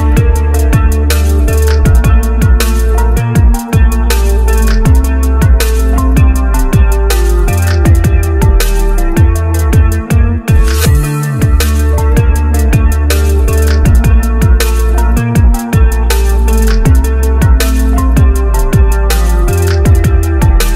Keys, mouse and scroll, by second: 4.0 scroll up 1, 4.6 scroll, 5.3 c, 8.6 scroll up 1, 13.3-14.1 scroll up 1, 14.1 scroll, 17.2 right click, 17.4 right click, 17.7 right click, 18.1 right click, 18.5-19.0 scroll down 1.